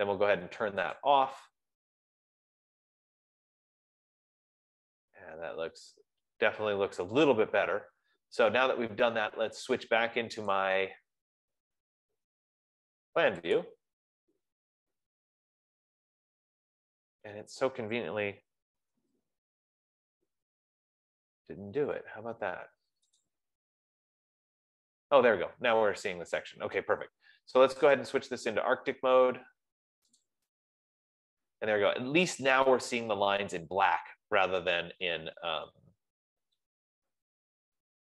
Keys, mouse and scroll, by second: 1.6 click, 3.3-4.0 scroll, 4.4-5.0 scroll, 5.1-5.6 scroll, 5.6-6.0 scroll, 6.7-7.9 scroll, 11.1 click, 14.2 click, 19.1 click, 19.5 ctrl+z, 23.6 click, 25.4 click, 28.6 click, 30.6 click.